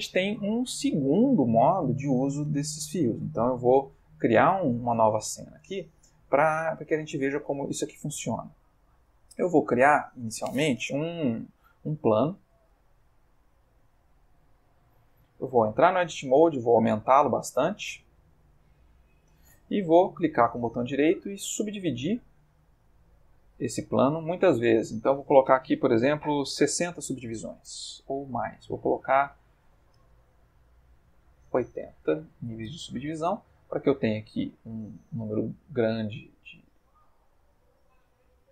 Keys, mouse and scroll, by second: 3.5 click, 4.6 click, 6.2 click, 7.0-7.5 ctrl+middle drag, 8.3-9.0 ctrl+middle drag, 9.5 x, 9.7 click, 12.5 shift+a, 14.1 click, 15.5 Tab, 16.3 s, 17.6 click, 18.1 s, 19.0 click, 20.0 right click, 23.1 click, 24.2 click, 24.8 click, 26.5 6, 27.0 Return, 29.3 click, 31.3 8, 31.4 0, 31.9 Return, 33.2-34.6 middle drag, 34.7-36.0 ctrl+middle drag, 36.1 ctrl+middle click, 37.6 click, 38.3 ctrl+middle click.